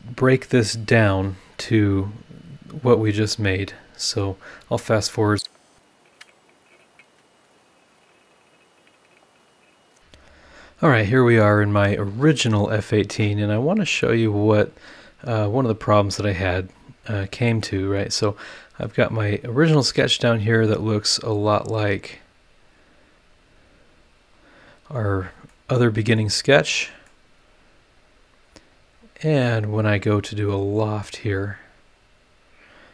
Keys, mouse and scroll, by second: 2.4 click, 2.8 Delete, 4.2 click, 5.5 click, 5.6 scroll down 2, 5.8 click, 5.9 click, 6.0 ctrl+l, 6.1 ctrl+v, 6.2 shift+o, 6.5 Delete, 6.5 scroll up 1, 6.6 Delete, 6.7 click, 6.8 click, 6.9 click, 7.0 Delete, 7.0 click, 7.2 click, 7.5 scroll down 2, 7.6 click, 7.6 Left, 7.7 Delete, 8.0 click, 8.1 Delete, 8.2 click, 8.2 Delete, 8.3 click, 8.4 scroll down 2, 8.4 Delete, 8.4 Delete, 8.5 Delete, 8.5 click, 8.6 click, 8.7 Delete, 8.8 click, 8.8 space, 8.9 scroll down 1, 8.9 space, 9.0 click, 9.0 Delete, 9.1 Delete, 9.2 click, 9.3 space, 9.4 scroll down 2, 9.4 space, 9.5 click, 9.6 click, 9.6 Delete, 9.7 click, 10.5 scroll down 1, 10.9-11.5 scroll up 2, 13.6 scroll down 1, 14.5-15.4 scroll up 5, 15.7-16.2 scroll up 4, 16.9-18.1 scroll up 8, 20.5 click, 21.2-21.8 scroll down 2, 22.5 click, 23.2-25.2 scroll up 7, 25.5 middle click, 26.2 middle click, 26.2 scroll up 1, 26.8 middle click, 28.0 click, 28.4-29.4 scroll down 1, 29.5 scroll down 1, 31.9 click.